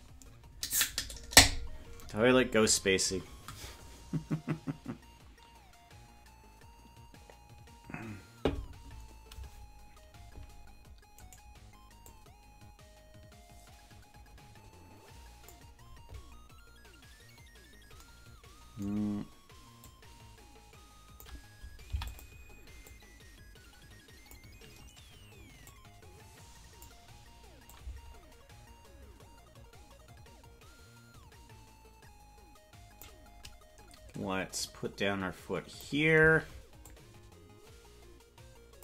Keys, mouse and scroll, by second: 12.1-15.6 drag, 12.1 right click, 19.9-21.3 drag, 21.8 i, 22.9-24.4 drag, 25.6-26.9 drag, 27.7-33.1 drag, 34.6-35.9 drag, 36.8-38.8 shift+drag.